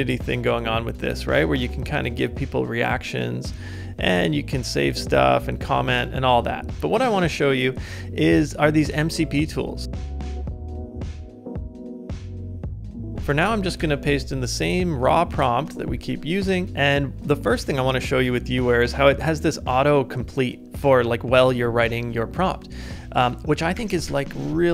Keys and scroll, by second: 13.8 super+v, 16.7 super+v, 23.7 shift+Return.